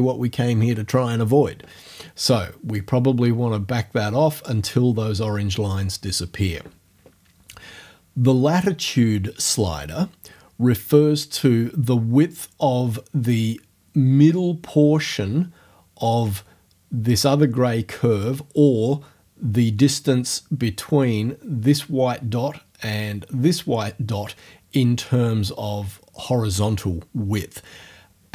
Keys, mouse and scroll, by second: 2.7-4.7 drag.